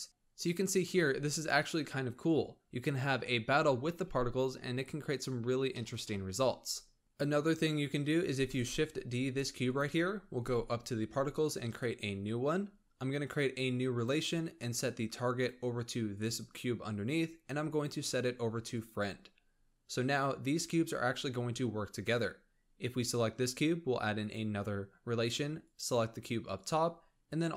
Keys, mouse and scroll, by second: 4.5-4.9 scroll down 4, 4.9 scroll up 2, 5.6-7.0 shift+middle drag, 8.1 shift+d, 10.1-10.7 scroll up 10, 11.5-12.4 drag, 12.4-13.7 scroll down 13, 13.7-15.3 drag, 17.5-20.5 drag, 21.7 click, 24.0-25.6 drag, 27.3-27.5 drag.